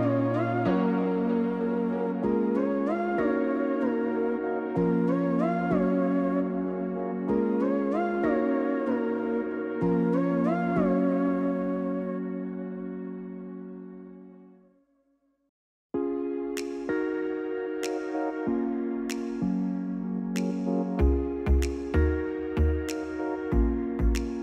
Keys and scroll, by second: 3.2-4.1 typing, 6.3 Return, 6.7 0.